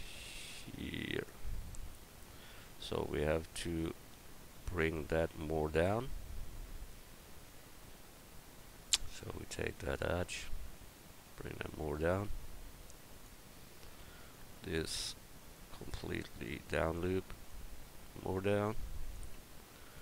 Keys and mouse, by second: 5.0 right click, 5.3 Tab, 14.0 Tab, 14.5 Tab, 19.4 Tab.